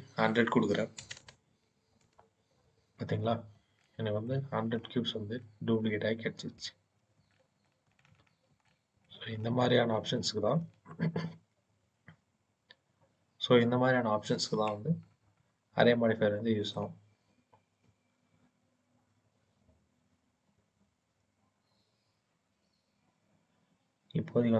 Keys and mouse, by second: 1.0 KP_0, 3.6-4.1 shift+middle drag, 5.3 shift+middle click, 7.2 shift+middle click, 8.5-8.9 shift+middle drag, 10.0 shift+middle click, 15.8-16.6 shift+middle drag.